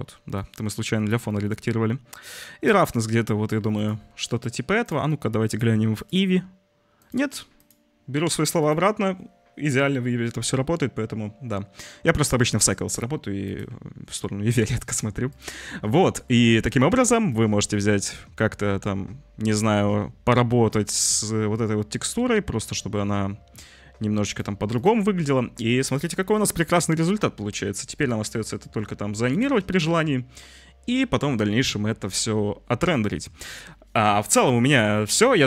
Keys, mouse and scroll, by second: 0.4-3.5 drag, 4.8 click, 5.5-6.2 drag, 6.9 click, 7.6-13.5 drag, 14.7-15.4 drag, 16.0 click, 16.7 drag, 17.2-24.3 drag, 27.4 g.